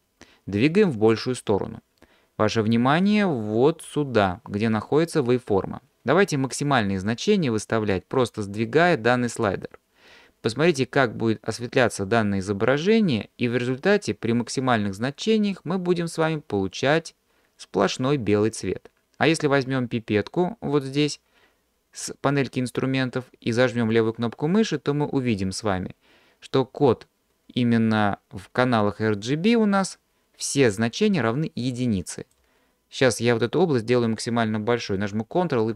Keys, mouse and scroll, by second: 8.4-15.9 drag, 23.9 click.